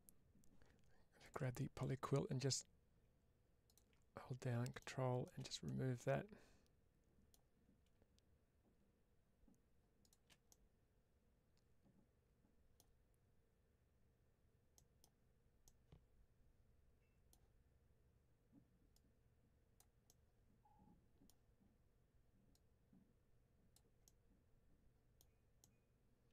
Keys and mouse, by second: 1.1 click, 3.6 ctrl+click, 5.5-7.2 middle drag, 10.4-12.6 middle drag, 14.6 middle click, 15.5-17.2 middle drag, 18.8-19.7 drag, 19.9-21.1 middle drag, 22.4 click, 23.9-25.1 middle drag, 25.5-26.2 middle drag.